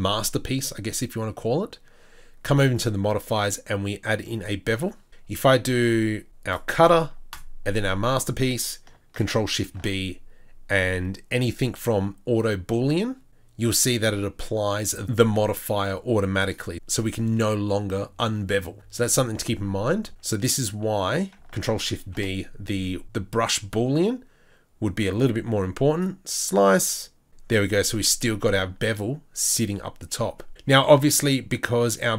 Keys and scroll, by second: 19.7 ctrl+z, 20.1 ctrl+z.